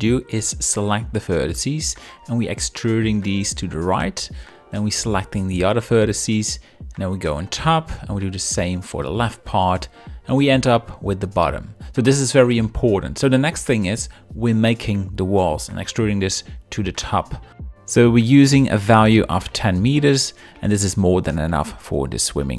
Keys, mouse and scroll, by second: 0.1 shift+middle click, 0.3 z, 1.4 middle click, 1.9 KP_7, 3.5 ctrl+click, 3.7 middle click, 5.9 KP_7, 6.2 middle click, 6.4 click, 6.5 shift+click, 6.7 shift+click, 6.9 KP_7, 7.1 shift+middle click, 7.3 e, 7.9 ctrl+click, 8.1 middle click, 8.4 click, 8.7 shift+click, 8.9 KP_7, 9.1 shift+middle click, 9.2 e, 9.9 ctrl+click, 10.0 shift+middle click, 10.2 middle click, 10.5 middle click, 10.7 shift+click, 11.3 KP_7, 11.5 shift+middle click, 11.6 e, 12.2 ctrl+click, 12.4 middle click, 12.6 Tab, 15.2 ctrl+click, 20.8 middle click, 21.9 middle click.